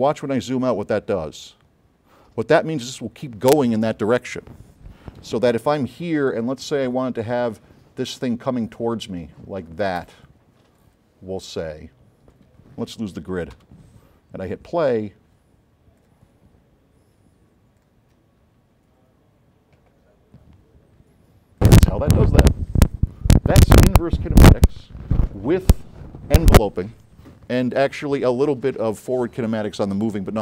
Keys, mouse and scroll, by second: 0.0 middle click, 0.2 middle click, 0.5 middle click, 1.0 middle click, 1.4 middle click, 1.7 middle click, 2.0 middle click, 5.3 s, 7.0 middle click, 7.6-8.8 drag, 8.9 right click, 10.3 click, 13.6 g, 16.1 click, 21.7 click.